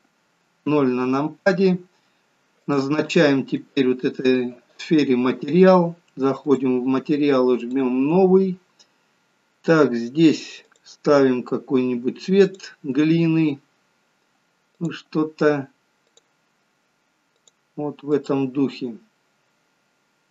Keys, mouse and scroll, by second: 0.7 KP_0, 1.8-2.7 scroll down 1, 2.7 click, 2.7 scroll down 2, 4.5 click, 6.5 click, 7.7 click, 11.7 click, 12.5 click, 20.0 click.